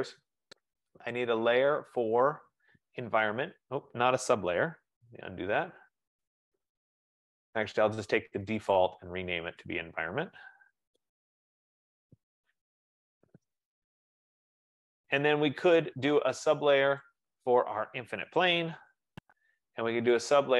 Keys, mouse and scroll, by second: 2.3 click, 5.2 ctrl+z, 6.5 click, 9.0 click, 9.1 click, 10.3 click, 10.5-13.6 typing, 14.8 click, 17.2 click, 18.3-19.4 typing.